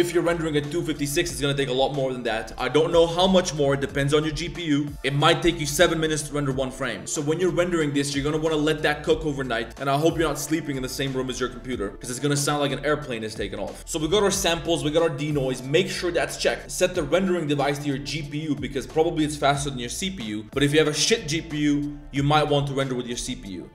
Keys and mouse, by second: 16.6-17.6 drag, 19.9-23.6 drag.